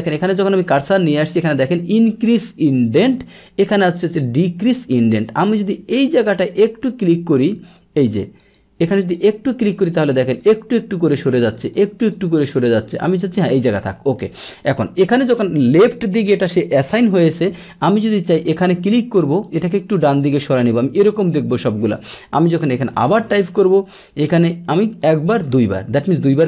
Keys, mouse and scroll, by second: 5.9 click, 7.3 click, 8.4 click, 9.1 click, 9.7 click, 10.4 click, 10.9 click, 11.3 click, 11.7 click, 11.9 click, 12.2 click, 12.5 click, 12.7 click, 14.2 click, 18.3 click, 19.3 click, 20.1 click, 21.9 click, 23.2 click, 23.8 click, 25.0 click, 25.4 click.